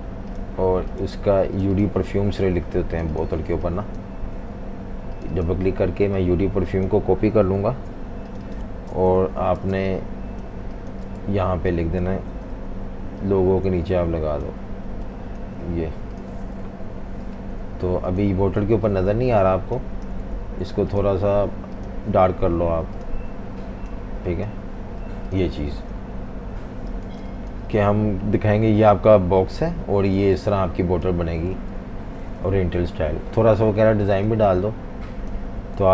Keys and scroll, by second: 3.4-4.4 typing, 7.6 super+c, 8.9 super+-, 9.1 super+-, 9.7-11.7 typing, 11.2 super+v, 12.3 super+g, 16.6 super+-, 16.8 super+-, 18.6 typing, 20.2 v, 25.0 v, 25.1 v, 26.3 super+-, 26.4 super+-, 27.1 typing, 30.3 z, 31.5 typing, 32.8 super+-, 33.0 super+-, 34.3 z, 34.4 z, 35.8 v.